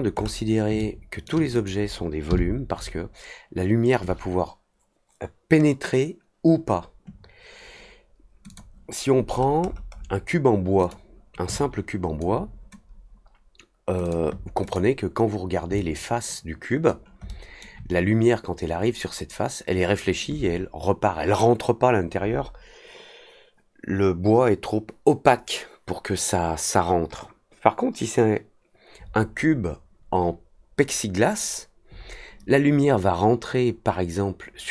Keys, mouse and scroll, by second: 0.1 middle click, 0.7-1.2 alt+middle drag, 1.5 click, 8.4 click, 9.3 middle click, 9.6 middle click, 9.8 middle click, 10.8 click, 11.5 alt+click, 14.0 click, 14.6 click, 15.7-16.8 alt+drag, 17.2 alt+middle click.